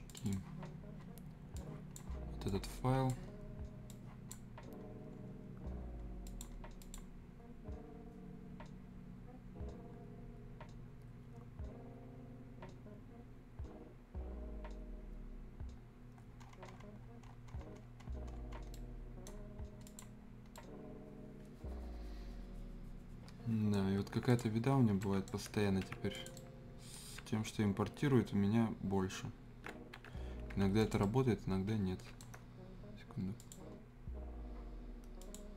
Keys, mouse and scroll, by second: 0.1-5.0 drag, 5.0-5.7 scroll down 1, 5.7-6.2 scroll up 1, 6.2 click, 7.1-8.2 scroll up 1, 9.9-11.7 scroll up 1, 16.1 scroll down 1, 18.7 right click, 19.6 scroll up 1, 19.8 click, 20.5-23.9 right drag, 23.9 scroll up 1, 24.3 shift+click, 24.5 shift+scroll down 1, 25.0 right click, 25.8 ctrl+alt+s, 26.1 ctrl+click, 26.3-30.4 ctrl+right drag, 30.4 ctrl+alt+s, 30.8 click, 31.0-33.4 right drag, 33.4 click.